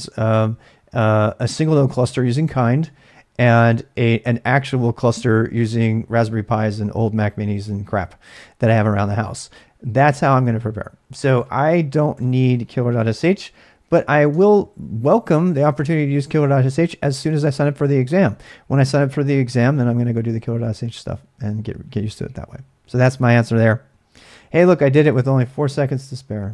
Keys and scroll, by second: 13.2 ctrl+c, 13.6-14.7 typing.